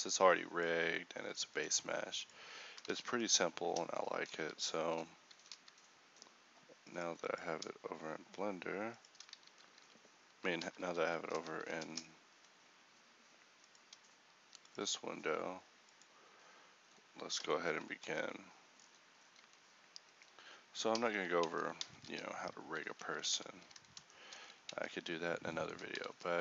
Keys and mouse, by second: 2.9 ctrl+v, 4.3 1, 19.5 a, 21.5 ctrl+t, 21.9 a, 23.0 alt+g, 23.3 alt+r, 23.8 a, 24.9 ctrl+t.